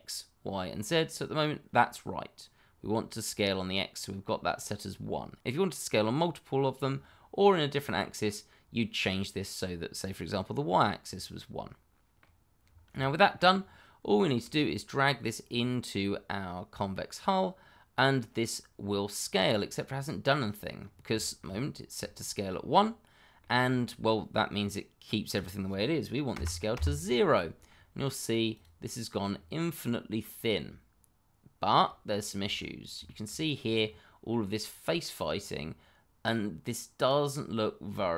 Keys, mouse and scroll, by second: 11.0-11.3 scroll down 1, 11.3 middle click, 12.6 scroll down 1, 13.5-14.0 scroll up 1, 14.1 shift+middle click, 15.4 click, 19.6 scroll down 1, 19.9 middle click, 20.7-21.1 scroll up 1, 21.1 shift+middle click, 22.0 middle click, 22.1 shift+middle click, 22.8-23.3 scroll down 1, 23.4 shift+middle click, 25.3 click, 26.3 0, 26.7 Return, 28.5 click, 29.2-29.7 scroll up 1, 29.7 middle click, 32.1 shift+middle click, 32.5-33.0 scroll up 1, 33.0 shift+middle click, 33.5 scroll down 1, 33.8 middle click.